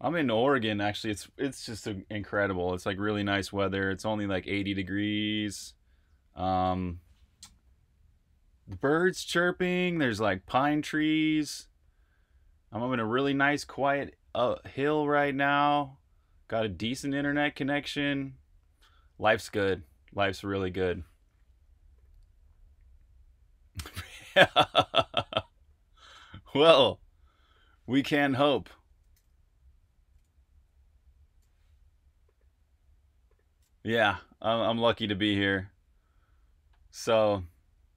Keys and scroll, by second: 0.4-1.1 typing, 28.6-30.5 typing.